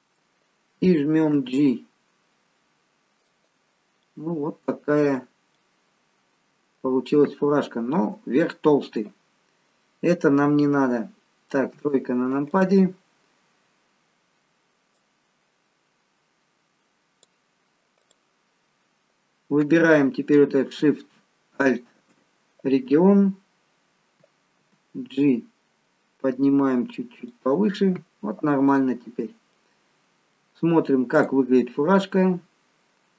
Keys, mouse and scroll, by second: 1.6 g, 4.1 middle click, 5.5 middle click, 7.1 middle click, 11.8 KP_3, 12.5 click, 14.9 click, 18.1 click, 21.7 alt+shift+click, 25.8 g, 28.8 click, 29.5 middle click, 31.2 click, 31.7 middle click.